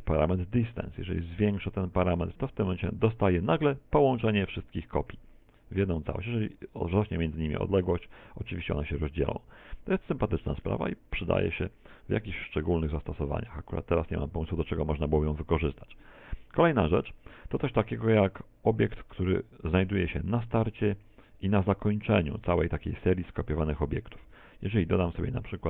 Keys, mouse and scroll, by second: 0.6 click, 7.2 click, 12.1-12.7 scroll down 3, 12.7 middle click, 12.7 scroll down 1, 24.2 shift+a.